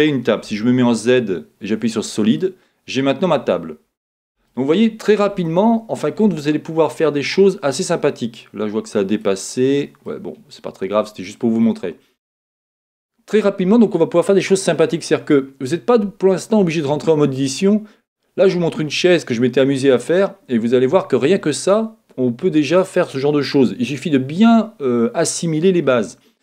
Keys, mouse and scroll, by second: 0.5 z, 2.4-26.4 middle drag.